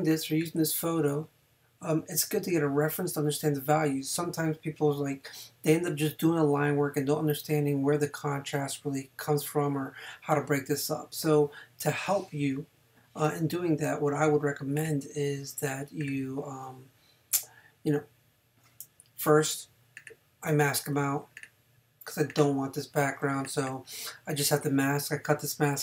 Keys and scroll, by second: 23.2 space.